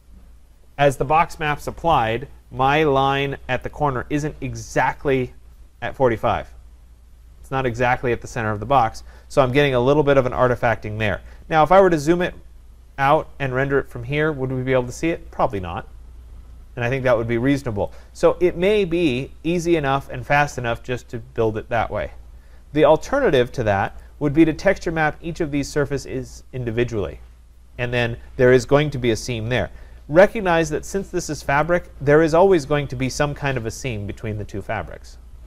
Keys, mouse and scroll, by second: 0.5 scroll, 12.3-12.9 scroll, 13.1-13.9 scroll, 20.1 right click, 24.1 click, 31.8 click, 32.8 scroll.